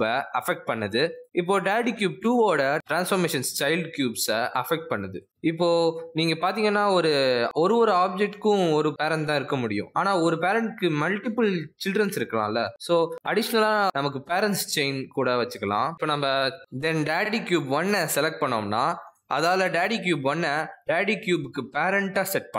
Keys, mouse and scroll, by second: 2.7 click, 3.1 r, 5.5 click, 6.0 scroll down 1, 8.1-8.5 scroll down 2, 8.1 r, 8.9 g, 9.9 s, 16.3 click, 17.8 click, 18.5 shift+click, 21.2 ctrl+p.